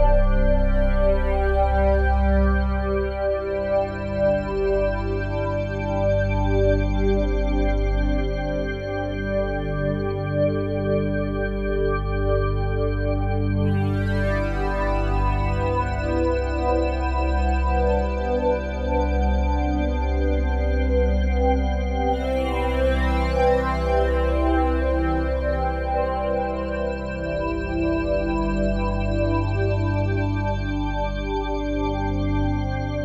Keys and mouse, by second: 0.2-4.4 drag, 5.3 typing, 6.1 click, 7.2-8.5 alt+shift+drag, 8.4-10.4 typing, 9.2-12.2 drag, 12.2 typing, 12.7-16.4 drag, 16.4 Escape, 16.8-19.3 ctrl+alt+drag, 17.5 typing, 19.1 typing, 19.5-22.8 drag, 22.3-23.1 typing, 23.1-24.9 ctrl+alt+drag, 24.9 typing, 25.7-27.8 drag, 26.2 typing, 27.6-28.7 typing, 28.6-30.3 drag, 30.1-31.7 typing, 31.1 click, 32.5 click.